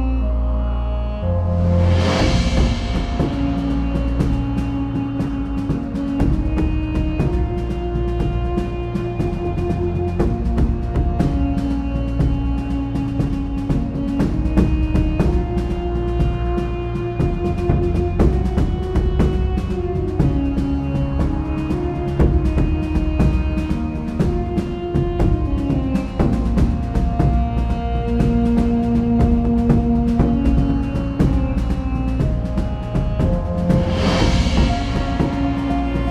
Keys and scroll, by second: 4.4 Return, 18.8-19.1 typing.